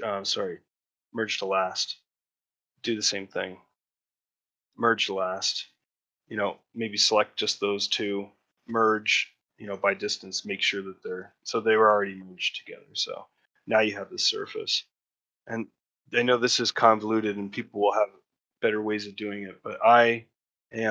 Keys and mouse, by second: 7.0 middle click, 12.1 click, 14.6 click, 15.0 shift+middle click, 15.4 Tab, 15.8 Tab, 16.6 3, 17.4 x, 18.6 middle click, 19.8 shift+middle click, 20.5 middle click.